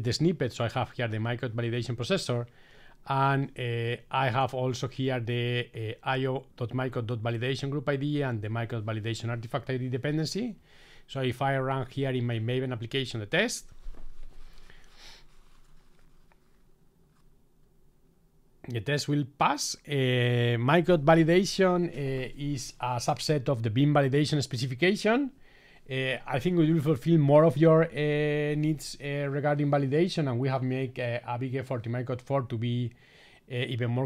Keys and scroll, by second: 13.2 ctrl+shift+r.